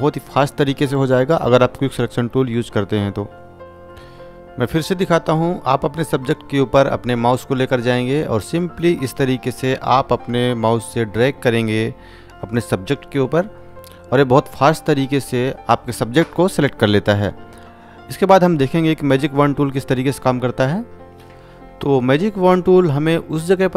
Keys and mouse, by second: 1.4 click, 7.3 click, 18.0 right click.